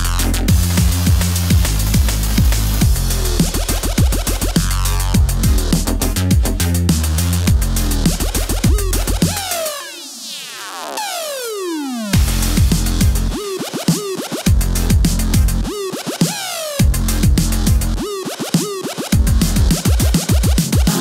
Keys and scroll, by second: 2.0 KP_0, 5.5-6.9 typing, 9.1 KP_2, 9.1 Home, 10.4 v, 11.2 super+-, 11.6 space, 12.0 shift+super+y, 13.9 Home, 14.0-15.4 typing, 17.0-18.3 typing.